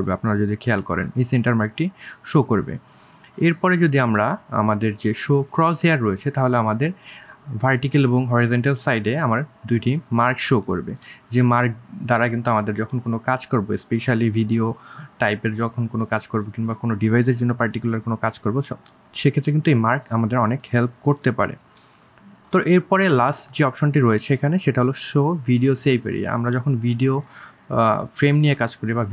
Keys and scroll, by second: 8.1 3, 8.5 1, 19.0 1.